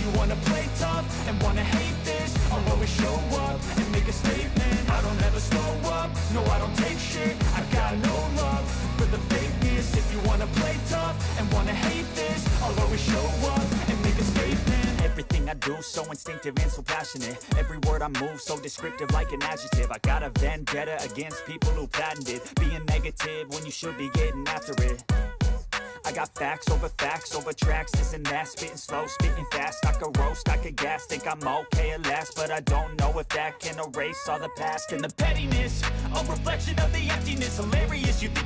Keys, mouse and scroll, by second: 1.8 click, 2.3 click, 3.8 click, 4.6 typing, 5.1 Return, 6.5 click, 7.3 click, 8.5 click, 9.8 click, 10.9 click, 12.3 a, 13.4 m, 14.3 click, 16.9 click, 19.1 click, 21.2 alt+click, 23.8 ctrl+b, 26.6 click, 27.8-28.2 typing, 31.2 click, 36.3 click, 36.8 middle click, 36.8 middle click, 38.3 click.